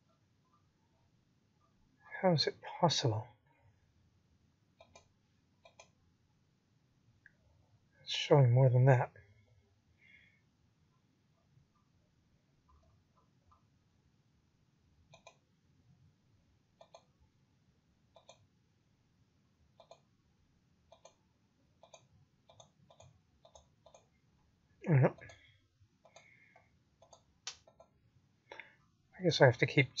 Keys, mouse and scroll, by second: 0.5-0.9 scroll up 4, 0.9-1.3 scroll down 5, 1.3 click, 2.5 middle click, 5.4 click, 17.6 click, 18.3-20.3 scroll up 24, 20.3-23.5 scroll up 29, 23.5 click, 24.4 click, 29.5-30.0 scroll down 21.